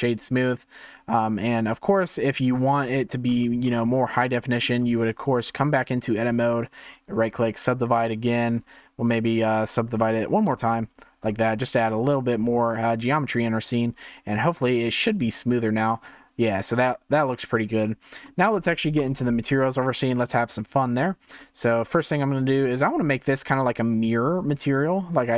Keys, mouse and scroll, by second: 0.2-2.8 middle drag, 2.8-3.6 scroll up 5, 3.6-4.2 scroll down 3, 4.2 middle click, 4.9 Tab, 5.4 scroll down 2, 6.9-8.5 right drag, 8.5-11.3 drag, 11.6 Tab, 12.8-16.4 drag, 17.8-18.2 drag, 18.2-19.0 middle drag, 19.0 KP_0, 19.8-20.3 shift+middle drag, 20.3 z, 21.3 scroll down 2, 21.9-25.1 shift+middle drag, 25.3 click.